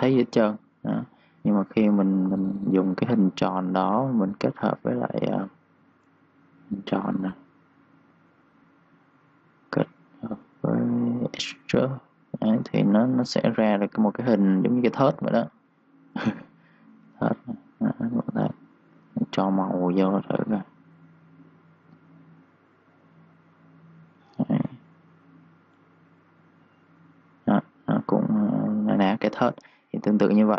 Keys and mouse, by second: 6.8 click, 9.9 click, 12.6-15.6 typing, 12.8 click, 17.0 click, 24.3-25.3 typing, 24.4 click, 26.5 click, 29.7 click, 29.8-30.5 typing, 30.0 click.